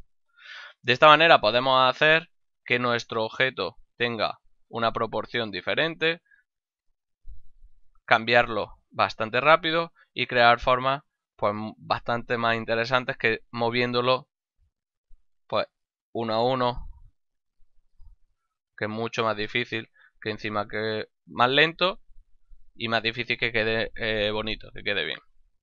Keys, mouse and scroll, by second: 0.7 right click, 2.0 right click, 2.2 g, 2.8 click, 3.9 right click, 4.1 g, 4.8 click, 5.5 right click, 5.7 g, 6.2 click, 7.0 right click, 7.1 g, 7.6 click, 8.3 right click, 8.6 g, 9.0 click, 9.9 middle click, 10.6 shift+middle click, 14.4 o, 15.0 right click, 16.4 shift+right click, 17.0 g, 17.3 click, 17.8 right click, 18.2 shift+right click, 18.3 g, 18.8 click, 19.2 right click, 19.5 shift+right click, 19.8 g, 20.1 click, 20.6 right click, 20.9 shift+right click, 21.2 g, 21.6 click, 22.0 right click, 22.4 shift+right click, 22.6 g, 23.0 click.